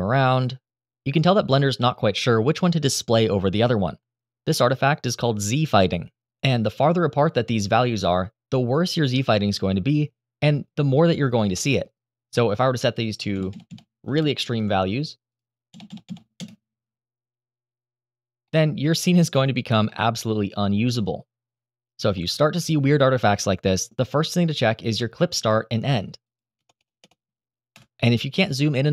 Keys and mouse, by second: 1.2 middle drag, 1.8 middle click, 3.2-13.2 drag, 13.2 KP_0, 13.4 KP_0, 15.6 KP_0, 18.2-18.9 middle drag, 19.6-21.4 middle drag, 21.9-23.6 middle drag, 25.1-26.5 drag, 26.5 BackSpace, 26.7 BackSpace, 27.9-28.9 drag.